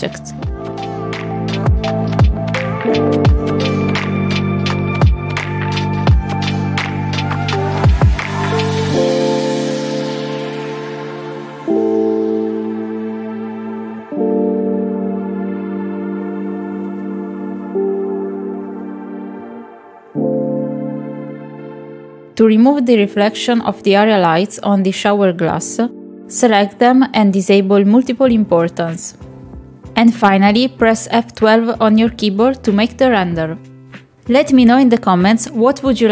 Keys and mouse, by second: 3.3 click, 4.1 s, 5.6 s, 6.9 click, 7.1 shift+click, 7.4 click, 8.2 s, 8.7 click, 9.2 middle click, 9.5 click, 9.6 middle click, 9.8 click, 10.0 middle click, 12.6 click, 15.5 middle click, 16.1 KP_Decimal, 16.5 shift+middle click, 18.6 ctrl+z, 20.4 click, 20.6 middle click, 21.1 click, 21.2 click, 21.5 Tab, 22.2 click, 22.4 l, 23.3 s, 23.9 Tab, 24.1 middle click, 25.2 middle click, 25.8 KP_0, 30.3 click, 31.4 click, 32.4 click.